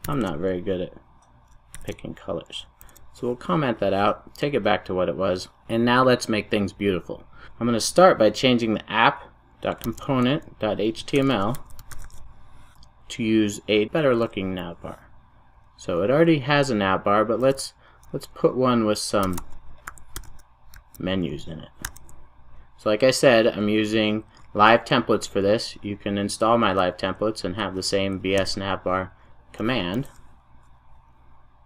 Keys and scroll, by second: 1.9 ctrl+alt+super+/, 5.2 super+s, 9.8 ctrl+shift+super+o, 17.4 super+a, 21.8 super+j, 28.5 Return, 30.5 super+s.